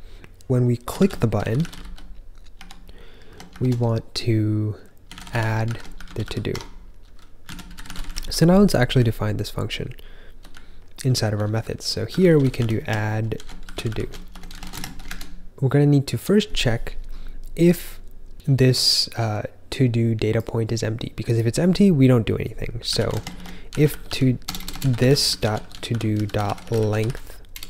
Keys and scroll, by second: 0.7-3.4 typing, 4.7-10.4 typing, 13.1-15.1 typing, 22.6-24.7 typing.